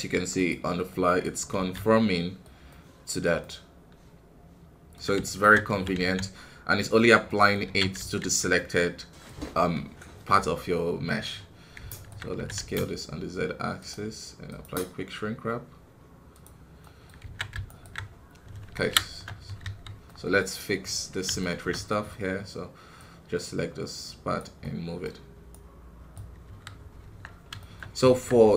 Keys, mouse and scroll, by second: 0.9 middle click, 1.5 alt+a, 1.7-5.2 middle drag, 5.2 alt+right click, 5.7 s, 7.2 middle click, 7.6 alt+a, 8.5-9.6 middle drag, 9.6 scroll down 2, 10.5 middle click, 11.3-11.9 scroll up 1, 11.9 alt+right click, 12.3 s, 14.4-17.2 drag, 17.2 alt+a, 17.6 alt+right click, 18.0-18.9 scroll down 1, 18.9 shift+KP_1, 19.6 KP_1, 20.0 middle click, 20.5 scroll up 2, 21.3-26.4 shift+middle drag, 26.4 KP_1, 27.0 Tab, 27.3 scroll down 1, 27.6 shift+middle click, 27.8 scroll up 1, 28.0 Tab.